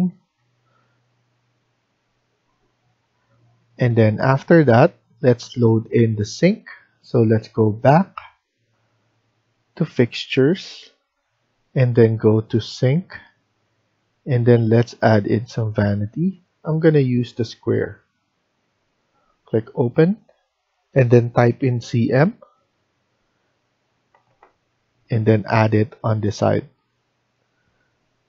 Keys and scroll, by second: 2.7 Escape, 3.1 Escape, 21.5-22.2 typing.